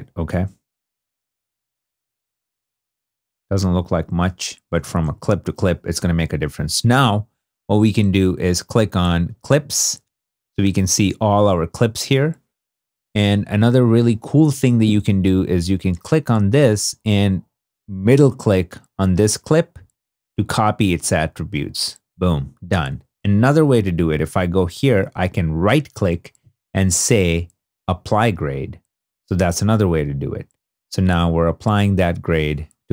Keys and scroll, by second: 1.4 super+d, 4.6 shift+super+d, 4.7 shift+super+z.